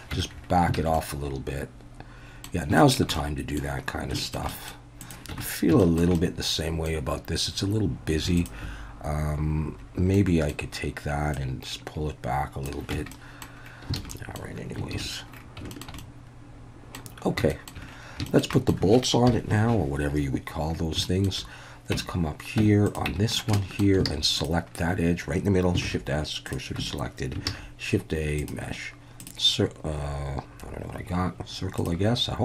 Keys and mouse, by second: 0.1 Tab, 0.8 alt+a, 0.9-2.4 middle drag, 2.8 shift+middle drag, 3.1-3.6 middle drag, 4.2 shift+middle drag, 4.5 middle click, 5.3 Tab, 5.8 shift+middle click, 6.2-6.9 middle drag, 8.4 alt+shift+drag, 10.2 middle click, 11.4-12.7 drag, 12.9 Tab, 13.1-13.4 middle drag, 14.0 alt+a, 14.1 middle drag, 14.9 ctrl+s, 15.7 shift+middle click, 16.0-17.0 middle drag, 17.5 shift+middle click, 18.3 shift+middle click, 18.6 middle click, 19.3 KP_1, 21.0 shift+middle click, 21.9 Tab, 22.6 Tab, 23.1 Tab, 23.6 shift+drag, 24.1 alt+a, 24.4 click, 25.9 shift+s, 26.8 Tab, 27.5 shift+a, 31.8 click.